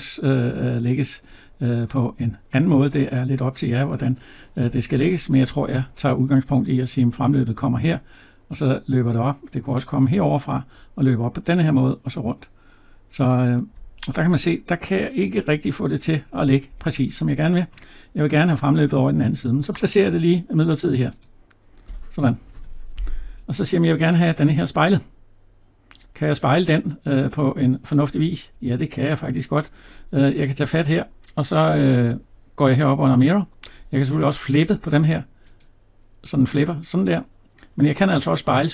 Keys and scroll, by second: 22.2 Escape.